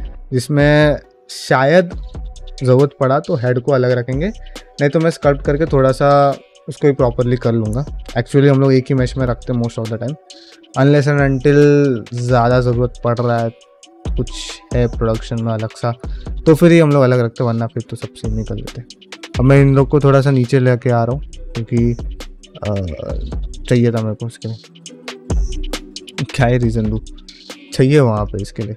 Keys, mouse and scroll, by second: 9.7 middle click, 10.2 ctrl+middle click, 12.3 shift+middle click, 12.7 ctrl+middle click, 13.0 shift+middle click, 13.4 middle click, 13.8 shift+middle click, 14.2 ctrl+middle click, 14.5 middle click, 15.6 ctrl+middle click, 15.9 shift+middle click, 16.3 middle click, 17.4 click, 17.7 g, 18.7 middle click, 19.3 click, 19.4 g, 20.3 click, 20.5 g, 21.3 middle click, 21.7 g, 22.3 click, 22.5 g, 23.2 middle click, 23.6 click, 23.8 g, 24.5 middle click, 24.8 shift+middle click, 25.3 click, 25.5 g, 26.0 click, 26.1 g, 26.5 shift+middle click, 26.8 middle click, 27.2 click, 27.4 g, 28.1 click, 28.2 g, 28.5 middle click.